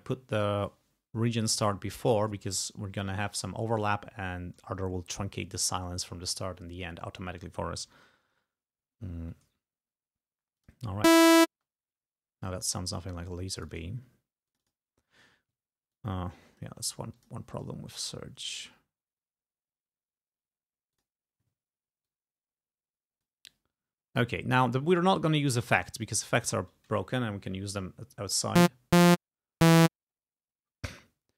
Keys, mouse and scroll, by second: 1.4 click, 2.7-3.1 ctrl+scroll down 4, 7.9 g, 10.6 click, 11.1 space, 13.6 click, 14.5 click, 16.0 click, 17.2 click, 17.6 click, 20.9 click, 22.1-23.5 drag.